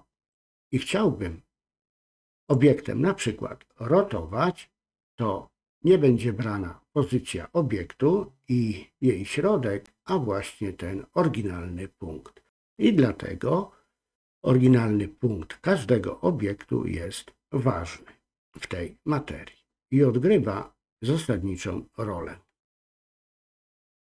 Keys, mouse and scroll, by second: 2.4 click.